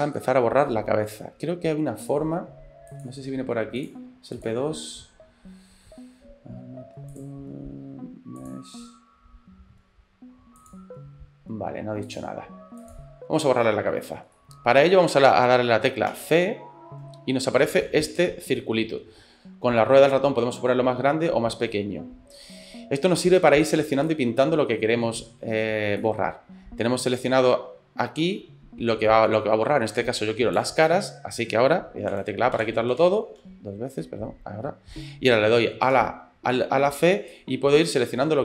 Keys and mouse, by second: 0.2-2.1 middle drag, 3.0 click, 4.4 click, 8.4 click, 12.1 click, 12.8 click, 13.5 middle click, 14.1 shift+middle click, 14.4 middle click, 16.1 c, 32.1-34.1 typing, 35.9 c.